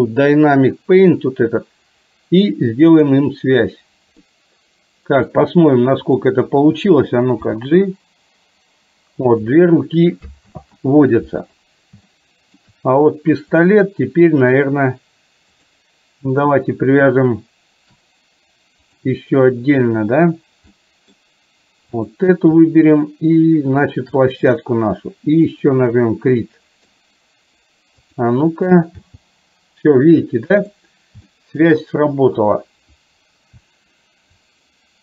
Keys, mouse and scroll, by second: 2.9 click, 4.3-5.4 middle drag, 6.1 click, 7.5 g, 10.5 ctrl+z, 12.1-12.8 shift+middle drag, 18.9 click, 20.9 middle drag, 23.9 shift+click, 25.6 click, 26.5-27.0 middle drag, 29.1 g, 31.4 shift+middle click.